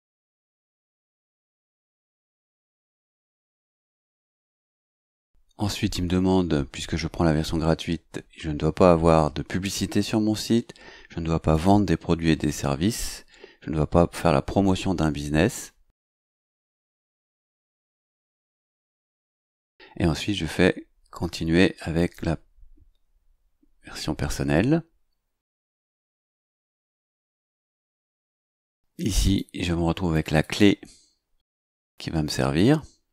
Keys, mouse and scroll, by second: 1.6 click, 2.9 click, 4.1 click, 11.4 click, 16.0 click, 21.9 click, 29.2 click, 30.1 click.